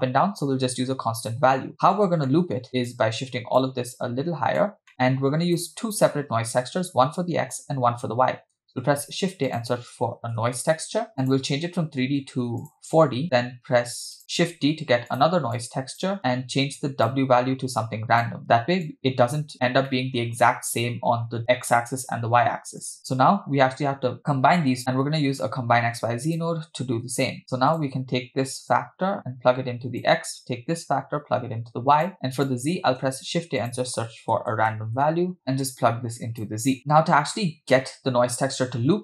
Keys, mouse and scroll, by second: 1.7 drag, 2.0 scroll down 2, 2.3 middle click, 2.7-3.1 drag, 3.6-4.7 drag, 4.9 middle click, 5.1 click, 9.6 shift+a, 11.1 scroll up 2, 11.3-12.8 drag, 14.4 shift+d, 15.6 click, 16.2 click, 17.8 click, 18.9 click, 19.5-19.9 scroll down 3, 19.9 middle click, 22.9 click, 25.9 shift+a, 28.7 click, 29.0-30.1 drag, 30.8-32.1 drag, 32.2 click, 33.2 shift+a, 35.7 click, 36.8 middle click.